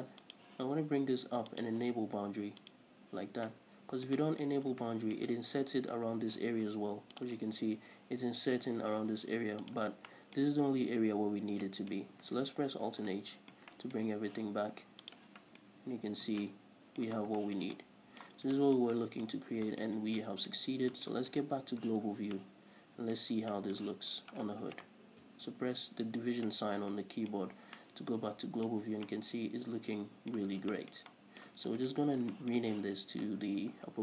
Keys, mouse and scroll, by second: 0.8 shift+click, 1.9 click, 3.1-3.9 drag, 3.9-7.7 middle drag, 4.9-5.3 scroll up 2, 7.7 click, 10.4 scroll down 1, 10.5-15.5 middle drag, 13.2 alt+h, 15.5 click, 15.8-21.7 middle drag, 16.3 a, 16.7 Tab, 17.6 scroll down 2, 18.8 scroll down 2, 19.8 scroll up 1, 20.4 scroll down 1, 21.1 scroll up 1, 21.7 right click, 22.0 scroll down 1, 22.8-32.3 middle drag, 23.7 scroll down 2, 25.0-25.8 scroll up 2, 25.8 scroll up 1, 25.9 KP_Divide, 26.5 a, 27.9 scroll down 2, 29.1-29.5 scroll up 2, 31.0 scroll down 2, 32.3 right click, 32.5 scroll up 1, 32.8-34.0 shift+middle drag, 33.8-34.0 scroll down 2.